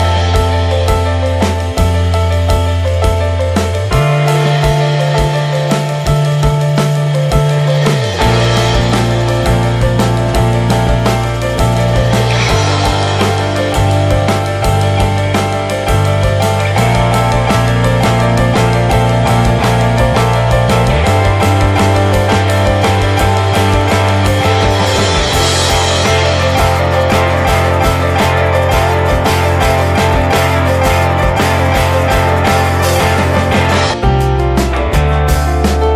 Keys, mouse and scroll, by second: 7.3 click, 8.9 click, 9.5 click, 9.8 middle click, 10.1 click, 20.0 right click, 20.5-20.8 scroll down 3, 20.8 middle click, 21.0 click, 21.2 scroll up 2, 21.4 middle click, 21.7 click, 32.4-33.2 drag, 33.2 scroll down 1, 33.4 scroll up 2, 33.6-34.5 middle drag, 34.5-34.8 drag, 34.8 middle click, 35.0 alt+z, 35.3-35.9 middle drag.